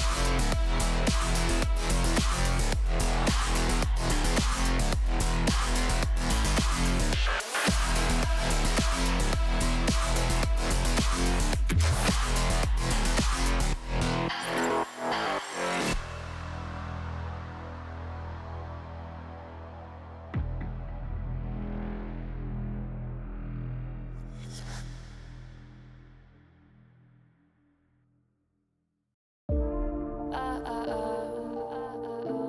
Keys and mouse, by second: 0.0 x, 0.1-1.2 drag, 1.2 right click, 2.4-4.6 shift+drag, 5.4 middle click, 6.1 shift+middle click, 7.6 shift+click, 8.7-9.9 shift+drag, 11.1 KP_7, 12.0-12.3 shift+drag, 13.6 s, 14.7 x, 14.8 x, 15.4 z, 16.7-17.8 drag, 18.2 o, 18.7 s, 23.0 shift+click, 24.5 click, 25.4 shift+middle click, 26.3 s, 28.4 click, 29.9 s, 30.0 s, 30.3 Tab, 30.8 z, 31.2-31.6 drag, 31.9-32.2 shift+drag.